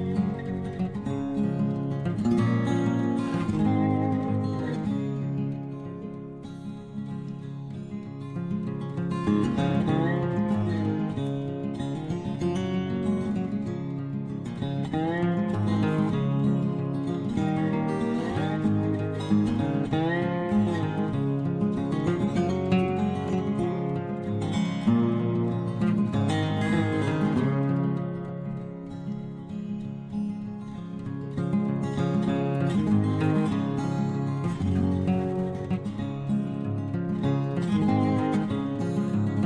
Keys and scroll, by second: 0.0-1.1 typing, 13.4 Return, 14.2-15.8 typing, 24.2 Return, 26.0 Return, 26.8 Return.